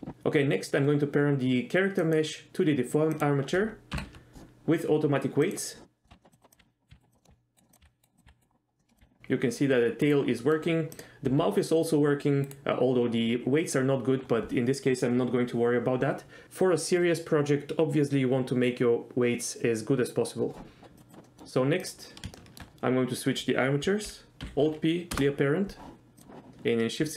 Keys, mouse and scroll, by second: 2.1 click, 3.3 shift+click, 4.1 ctrl+p, 6.0 middle click, 6.1 Tab, 6.2 middle click, 6.3 click, 6.5 click, 6.6-9.0 typing, 7.1 click, 7.2 middle click, 7.6 middle click, 7.7 click, 8.2 click, 8.8 middle click, 10.2 right click, 10.5 middle click, 11.1 click, 11.4 r, 12.6 right click, 21.0 click, 21.3 middle click, 22.0 click, 22.5 shift+middle drag, 24.5 alt+p, 26.2 drag.